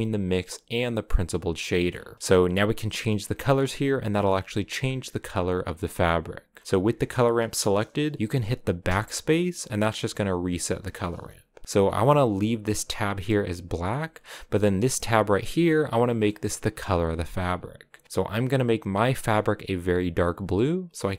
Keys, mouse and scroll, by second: 0.6 click, 1.6-2.2 scroll up 4, 2.2-4.2 drag, 4.2 shift+middle click, 4.4-5.3 scroll up 3, 6.6-8.0 drag, 8.6 BackSpace, 11.7 click, 14.1 click, 15.5 click, 16.0-18.6 middle drag, 18.6 click.